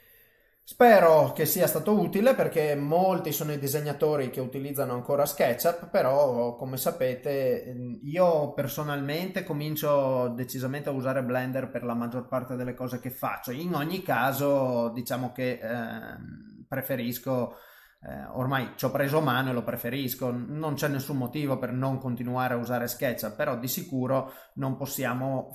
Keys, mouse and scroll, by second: 1.4 click, 1.4 middle click, 4.2 middle click, 6.5 middle click, 12.9 middle click, 22.0 middle click.